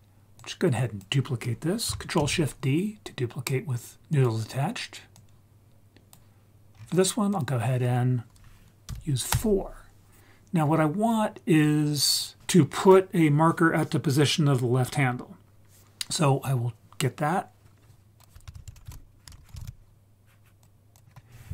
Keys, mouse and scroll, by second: 0.4 click, 2.2 ctrl+shift+d, 4.2 click, 5.2-6.2 drag, 6.7-7.3 scroll up 2, 7.3-9.3 drag, 11.0-11.9 scroll down 2, 11.9-12.8 scroll down 1, 18.2 click, 18.5 shift+a, 19.4 BackSpace, 21.0-21.5 scroll up 1.